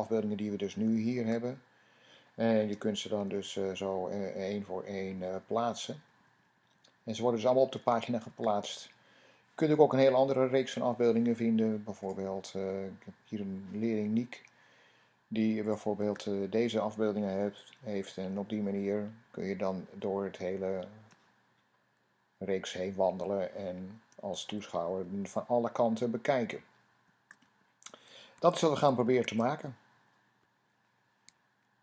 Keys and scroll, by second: 3.1 Down, 3.7 Down, 3.9 Down, 4.1 Down, 4.3 Down, 4.6 Down, 4.8 Down, 5.0 Down, 5.1 Down, 5.4-6.8 typing, 5.9 Down, 6.0 Down, 6.4 Down, 6.6 Down, 7.5 Down, 8.3-9.5 Down, 17.4 Down, 17.8 Down, 18.0 Down, 18.2 Down, 18.4-22.6 Down, 24.1 Down, 24.4 Down, 24.5 Down, 24.7 Down, 24.9 typing, 25.0 Down.